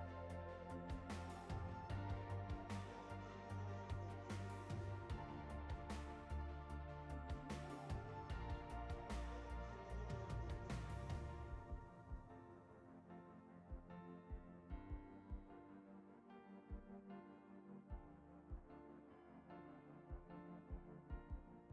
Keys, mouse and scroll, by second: 8.0-14.0 drag, 14.7-16.8 drag, 17.4-21.7 drag.